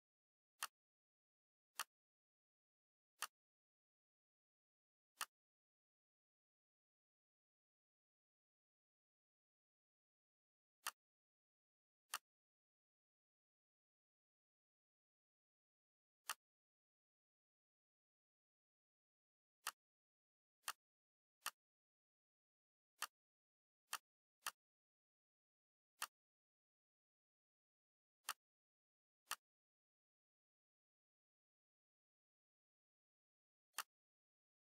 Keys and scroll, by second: 14.5 ctrl+shift+c, 17.6 ctrl+shift+v.